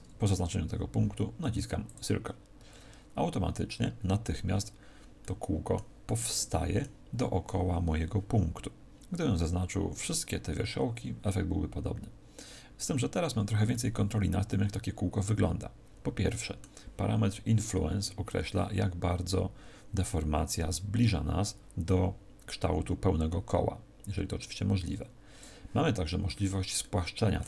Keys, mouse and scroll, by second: 1.8 click, 5.2 middle click, 6.0 middle click, 13.6 middle click, 18.2 click, 26.8 middle click.